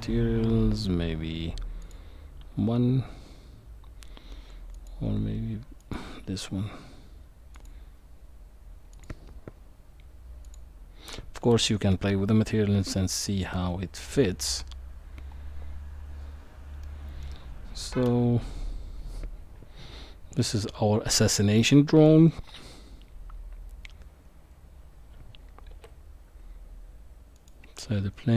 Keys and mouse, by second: 4.7 click, 7.5 click, 9.0-10.5 drag, 16.8-17.4 middle drag, 18.0 KP_1, 20.4-22.1 middle drag, 25.7 shift+a.